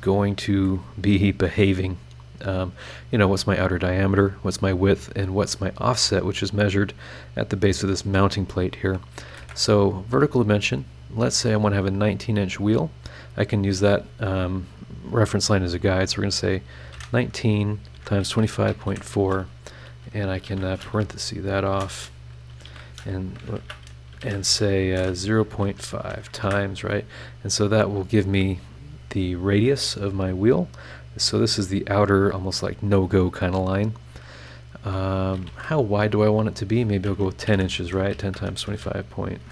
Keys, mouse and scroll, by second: 0.5 Escape, 8.6 click, 9.3 shift+v, 10.7 click, 12.8 click, 16.8 KP_1, 16.9 KP_9, 17.9 KP_Multiply, 18.2 KP_2, 18.4 KP_5, 18.7 KP_Decimal, 18.9 KP_4, 20.4 shift+0, 21.0 shift+BackSpace, 22.6-25.6 typing, 24.8 shift+Left, 26.0 KP_Multiply, 26.4 KP_Enter, 35.5 shift+h, 36.5 click, 37.5-39.5 typing, 37.8 KP_Multiply.